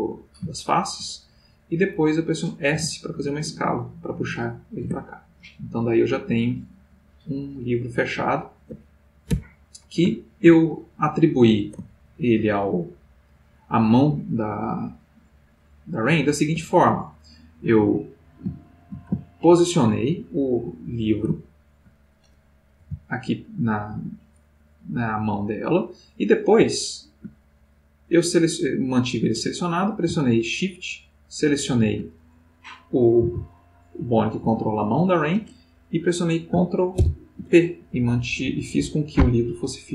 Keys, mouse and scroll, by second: 2.8 s, 4.5 middle click, 5.0 Tab, 5.4-8.9 middle drag, 9.7 /, 11.4-12.6 middle drag, 16.5 x, 16.8 click, 17.9 click, 18.8-22.6 shift+middle drag, 22.8 g, 25.9 middle click, 26.9-28.6 ctrl+middle drag, 30.7 shift+click, 33.2 r, 34.4 Escape, 36.9 ctrl+p, 37.8 Down.